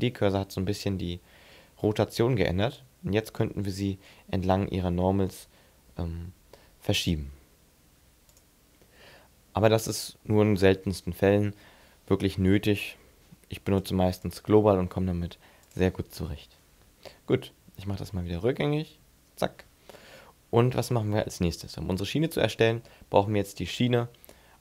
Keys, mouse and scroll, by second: 2.5 click, 13.7 click, 14.3 click, 17.1 ctrl+z, 17.7 ctrl+z, 18.1 ctrl+z, 18.7 ctrl+z, 20.0-20.3 scroll down 1, 20.4 scroll up 2, 21.1 shift+middle click, 21.7 scroll up 2, 22.1-22.6 scroll down 6, 22.9 shift+middle click, 24.2 scroll down 2.